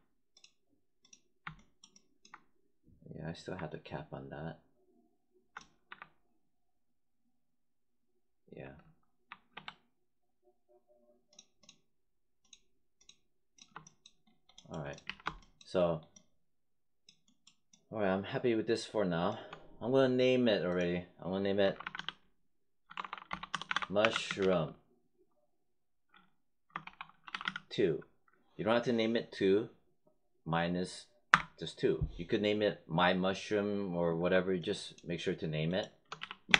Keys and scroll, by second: 5.8 1, 8.5 1, 9.4 3, 15.0 w, 21.5-24.8 typing, 26.5-27.8 typing, 31.2 Return, 36.1 w, 36.4 space.